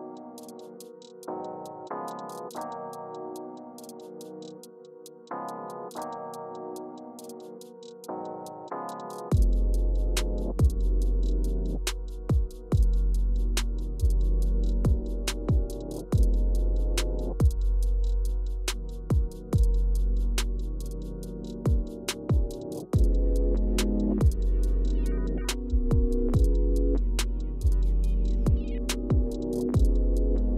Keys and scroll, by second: 1.3 super+[, 3.9-4.8 typing, 5.9 Right.